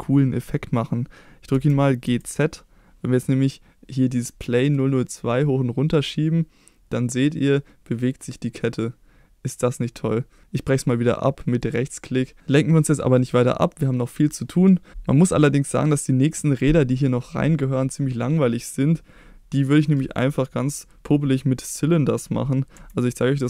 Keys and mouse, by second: 1.5 g, 2.0 z, 11.6 right click, 13.1 middle click, 15.1 middle click, 18.4 middle click, 22.7 KP_1.